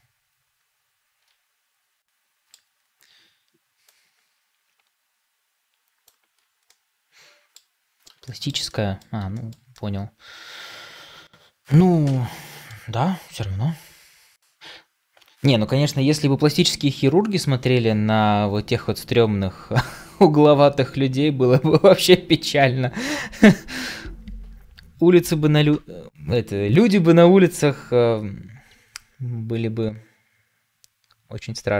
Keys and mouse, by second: 3.7-6.6 drag, 6.6-7.6 middle drag, 8.2 shift+middle drag, 8.6 middle drag, 9.2 shift+middle drag, 9.6-12.6 middle drag.